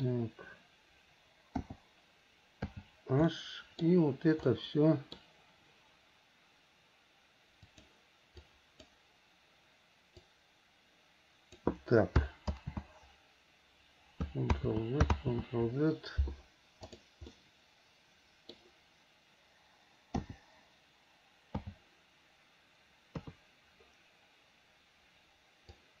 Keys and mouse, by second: 1.8 l, 2.8 h, 3.5 click, 3.7 middle click, 4.7 middle click, 10.5-11.8 drag, 12.7 ctrl+x, 14.7 ctrl+z, 15.3 ctrl+z, 17.0 click, 17.5-18.7 middle drag, 20.3 l, 21.8 h, 23.3 KP_3.